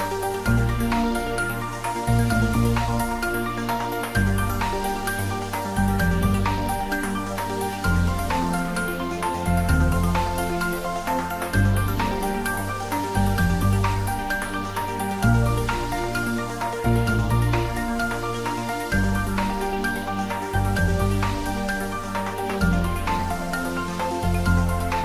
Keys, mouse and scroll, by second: 3.3-3.7 scroll down 1, 4.4 scroll up 1, 8.4 scroll down 1, 9.4-11.7 middle drag, 11.7 click, 14.2 click, 14.5 alt+shift+click, 16.4 scroll down 1, 17.7-22.3 middle drag, 22.3 alt+shift+click.